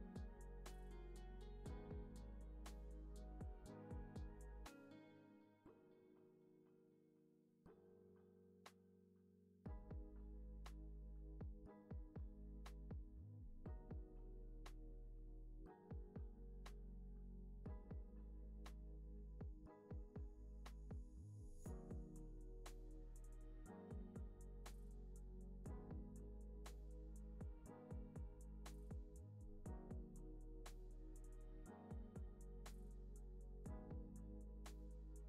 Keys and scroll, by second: 32.6 x, 33.2 z, 33.7 x, 34.9 c.